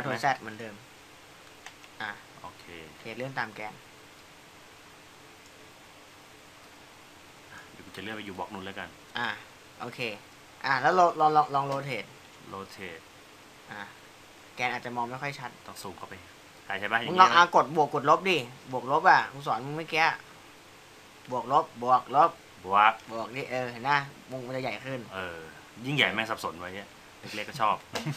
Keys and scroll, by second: 12.1 e, 19.5 w, 21.2 e, 26.5 -.